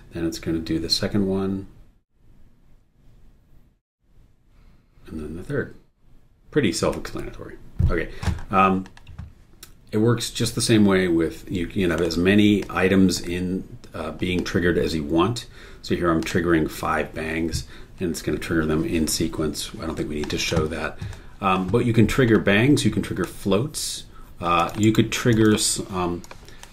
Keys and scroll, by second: 24.8 super+e.